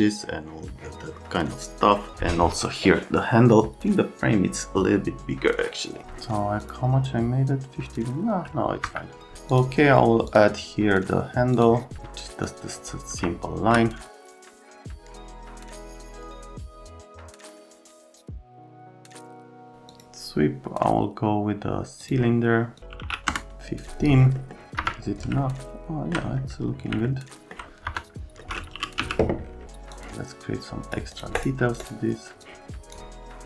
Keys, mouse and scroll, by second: 6.6 click, 8.8 F3, 9.5 click, 10.3 click, 11.5 click, 12.4-14.8 drag, 14.8 click, 14.9 right click, 15.0 alt+middle click, 15.3 right click, 15.6 click, 15.9 middle click, 16.3 click, 16.5 ctrl+z, 16.6 ctrl+z, 16.8 click, 16.9 click, 17.1 click, 17.7 middle click, 18.1 click, 18.3 KP_Subtract, 18.4-19.8 typing, 18.9 click, 19.0 click, 19.7 click, 19.9 click, 22.0 click, 22.9 KP_1, 23.0 KP_5, 23.3 Return, 24.3 right click, 24.5 middle click, 24.8 F3, 25.4 alt+middle click, 27.9 F3, 28.5-29.5 typing, 29.9 click, 31.1 click, 31.4 right click, 32.4 click.